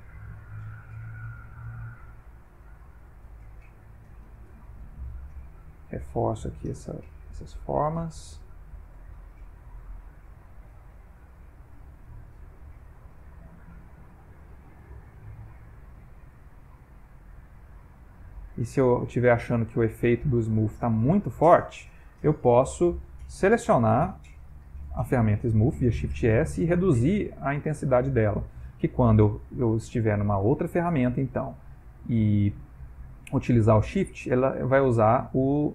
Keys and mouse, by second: 1.2 ctrl+click, 3.6 click, 4.2 click, 4.5 click, 5.0 click, 5.3 click, 5.8 click, 6.2 click, 6.6 click, 7.0 click, 7.6 middle click, 8.4 click, 9.0 middle click, 9.9 click, 10.3 middle click, 11.3 ctrl+click, 11.9 ctrl+click, 12.5 click, 13.2 ctrl+click, 13.7 ctrl+click, 14.8 ctrl+click, 15.9 f, 17.2 shift+click, 17.9 shift+click, 18.5 shift+click, 20.1 shift+click, 20.5 shift+click, 20.9 shift+click, 23.3 shift+space, 24.5 shift+s, 26.5 click, 30.6 shift+space, 33.8 shift+click, 34.4 shift+click, 34.7 shift+click, 35.2 shift+click.